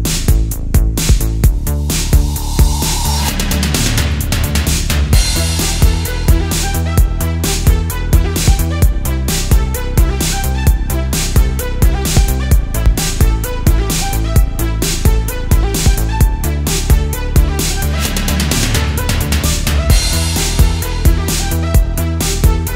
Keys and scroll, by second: 0.6 space, 1.3 super+z, 3.4 super+z, 5.5-7.9 typing, 9.7 super+z, 10.6 space, 13.2 space, 14.8 space, 16.5 space, 17.6 space, 22.2-22.7 typing.